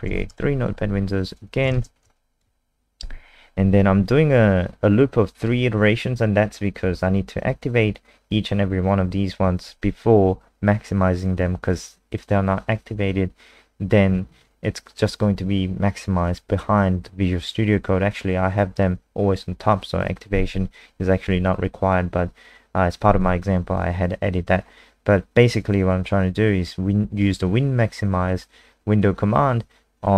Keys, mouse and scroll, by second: 0.0-0.6 typing, 1.0 alt+click, 1.5 click, 1.7 ctrl+alt+space, 2.1 alt+click.